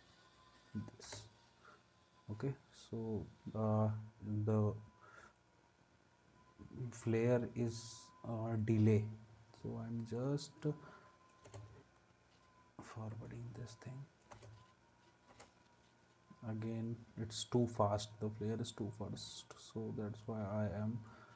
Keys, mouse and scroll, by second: 1.0 space, 11.5 space, 14.3 space, 15.3 space.